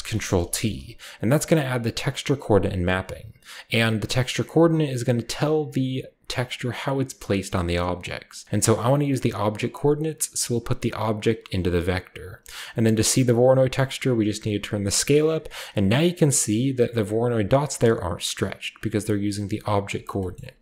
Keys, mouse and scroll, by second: 0.1-1.4 scroll up 1, 0.3-1.6 middle drag, 0.6 a, 1.4-2.6 scroll up 1, 1.4-2.6 drag, 2.7-3.9 scroll up 1, 3.9-4.3 drag, 3.9-5.3 scroll up 1, 6.5 drag, 7.9 click, 10.0-11.4 drag, 11.8 click, 13.6-15.4 drag, 17.3 scroll up 1, 17.9 scroll down 1, 18.7 drag, 19.2 click, 19.6 g, 19.8 click, 20.0 scroll down 1, 20.3 scroll up 1, 20.4 a.